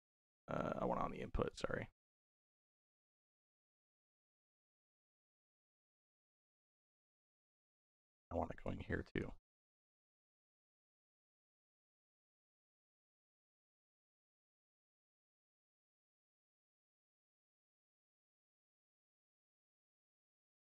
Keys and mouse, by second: 0.4-1.3 drag, 2.8-6.5 drag, 5.4 s, 7.4-8.5 drag, 8.9 click, 9.6 x, 10.3-11.6 drag, 12.0-13.6 drag, 14.8 middle click, 16.4 middle click, 18.1-20.6 drag.